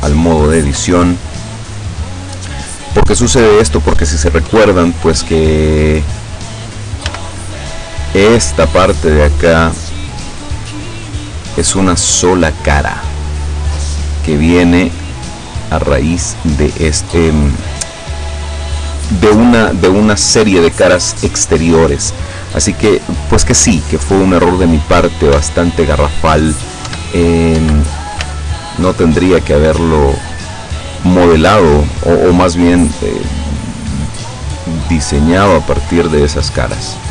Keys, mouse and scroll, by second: 0.1 shift+right click, 0.2 shift+middle click, 0.3 shift+right click, 0.3 shift+middle click, 1.0-2.3 shift+right drag, 2.8 right click, 4.5 KP_7, 7.1 z, 7.8-8.2 scroll up 1, 11.1 right click, 11.7 right click, 12.5 right click, 13.9 scroll up 1, 15.4 right click, 16.1 right click, 23.1 click, 24.9 scroll down 1, 25.5 shift+middle click, 26.9 Tab, 27.6 Tab, 28.4 z, 31.1 right click, 31.9 right click, 32.7 click, 33.5-34.7 drag, 35.1 right click, 35.9-37.0 drag.